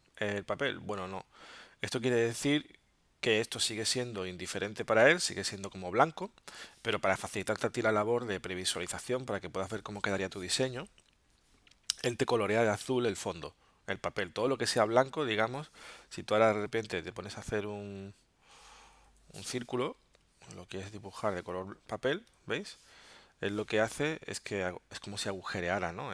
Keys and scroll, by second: 19.1 l, 23.1 v.